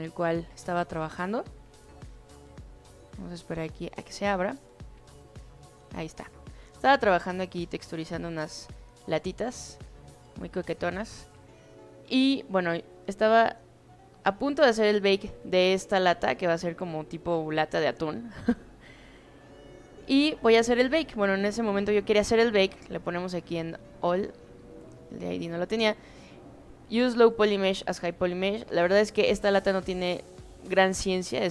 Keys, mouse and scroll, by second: 1.2 click, 6.6 alt+right click, 7.0 alt+right click, 7.3 alt+right click, 7.5 alt+middle click, 8.1 alt+right click, 8.4 alt+right click, 8.7 alt+middle click, 9.1 alt+click, 10.1 alt+middle click, 10.4 alt+right click, 10.7 alt+middle click, 12.9 click, 13.3 click, 14.1 click, 15.5 alt+middle click, 15.9 alt+right click, 16.2 alt+right click, 16.4 alt+middle click, 16.8-18.2 alt+drag, 18.5 alt+middle click, 19.5-19.9 drag, 20.8 click, 24.1 click, 25.0 click, 28.4-28.9 drag, 31.0-31.4 drag.